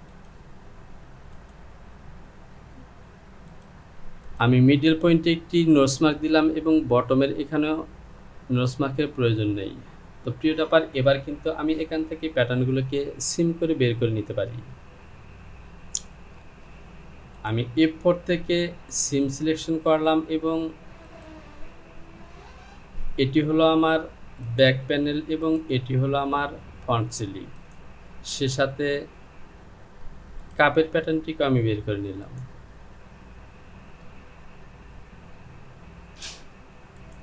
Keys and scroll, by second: 34.6 j.